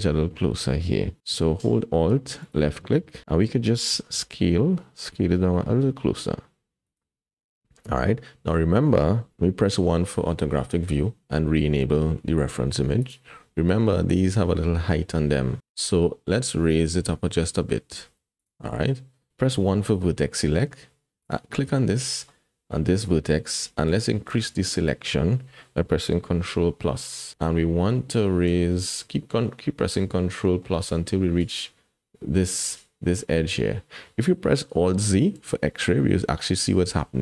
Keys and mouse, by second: 4.1 s, 10.3 KP_1, 13.0 click, 18.4 click, 18.9 click, 19.7 1, 22.3 click, 24.0 shift+middle click, 27.3 ctrl+KP_Add, 27.9 ctrl+KP_Add, 28.4 ctrl+KP_Add, 30.6 click, 30.9 middle click, 31.0 click, 31.1 middle click, 35.3 alt+z, 35.8-36.8 drag, 35.8 middle click, 36.8 middle click.